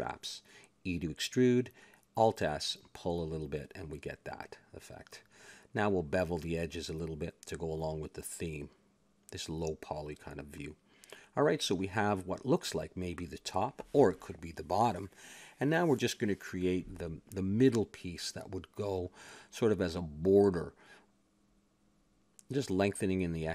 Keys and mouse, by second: 1.3 middle click, 2.1 e, 2.8 alt+s, 5.0-6.1 middle drag, 5.9 a, 6.1 ctrl+Tab, 7.5-9.0 drag, 9.0 ctrl+b, 10.8 a, 11.0 Tab, 11.5-14.3 middle drag, 13.4 shift+a, 14.9 click, 16.0 KP_7, 16.4 Tab, 17.2 z, 18.5 s, 21.1 s.